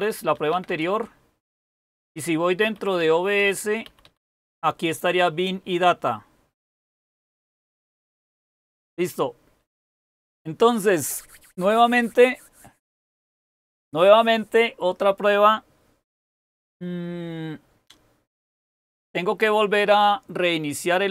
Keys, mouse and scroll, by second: 0.0-4.3 typing.